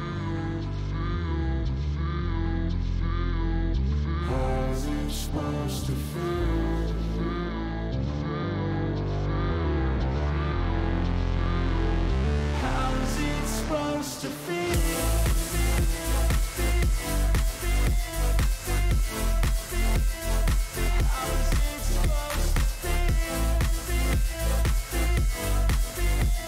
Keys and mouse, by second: 1.8-3.6 drag, 5.5 click, 7.9 click, 9.1 click, 10.5 click, 12.7 click, 15.1 click, 16.5 click, 19.4 click, 20.4 shift+click, 21.2 ctrl+click, 22.0 click, 23.3 shift+click, 24.7 shift+click, 25.5 ctrl+click, 26.3 click.